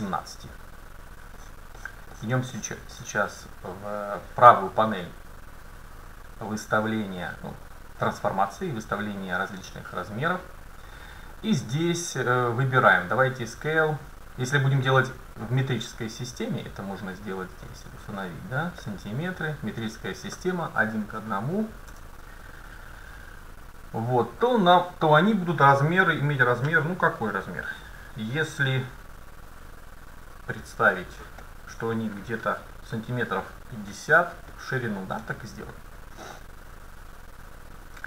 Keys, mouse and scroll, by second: 1.2-1.5 scroll up 1, 1.5-5.3 middle drag, 16.4-19.6 drag, 20.1-22.0 drag, 31.5 middle click, 33.3 middle click, 34.0 middle click, 34.7-35.4 scroll down 1, 35.4-36.5 middle drag.